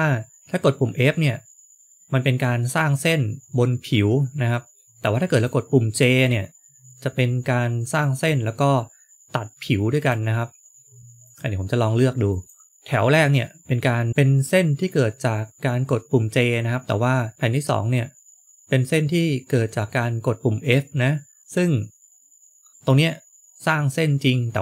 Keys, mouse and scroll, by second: 5.3 click, 10.0 click, 11.1 click, 13.1 click, 17.3 click.